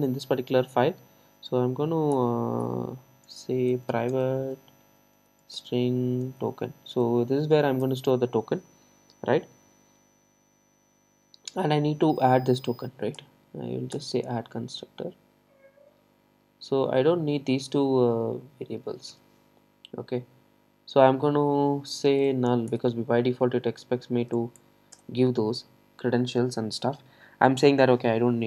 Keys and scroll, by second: 4.2 Return, 13.2 alt+Return, 22.7 Return.